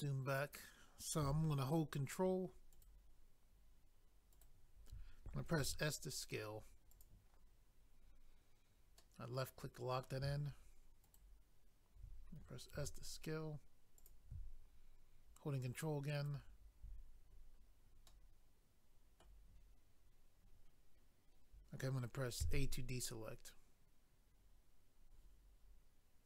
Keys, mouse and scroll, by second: 2.7 ctrl+right click, 4.3 ctrl+right click, 5.6 s, 6.9 click, 9.0 middle click, 11.0 ctrl+right click, 11.2 ctrl+right click, 14.0 s, 14.0 click, 14.1 click, 16.2 ctrl+right click, 16.3 ctrl+right click, 17.4 scroll down 1, 18.1 middle click, 22.5 a, 26.2 click.